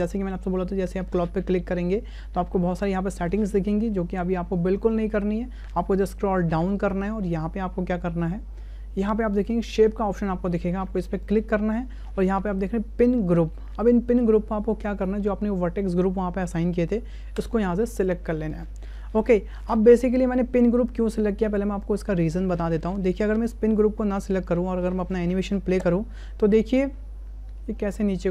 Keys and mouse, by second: 11.2 click, 15.0-17.5 drag, 25.7 space.